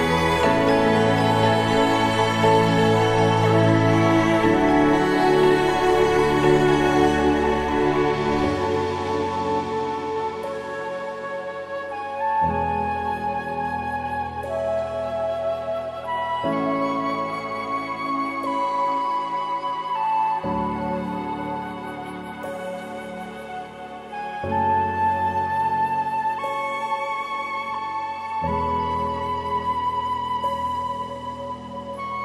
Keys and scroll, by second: 7.7 ctrl+t, 8.5 ctrl+-, 9.0 ctrl+-.